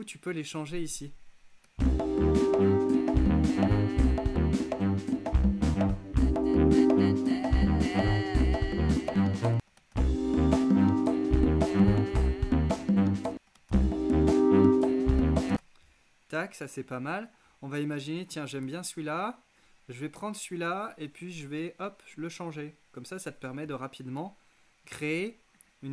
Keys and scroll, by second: 1.7 space, 9.6 space, 13.4 space, 15.6 space.